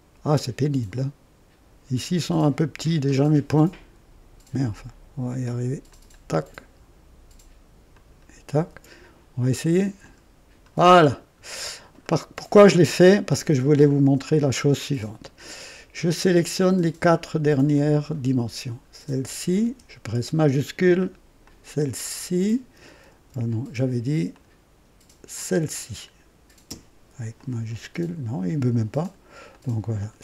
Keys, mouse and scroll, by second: 2.4 ctrl+click, 3.0 ctrl+right click, 5.8 ctrl+click, 7.9 ctrl+click, 10.0 click, 10.9-11.6 scroll down 2, 12.0-13.2 right drag, 15.9-16.6 right drag, 17.7 click, 19.0-19.6 scroll down 3, 21.4 shift+click, 24.3 click, 25.3 click, 27.3 shift+click, 29.0 ctrl+click, 29.5 ctrl+click, 29.9 ctrl+click.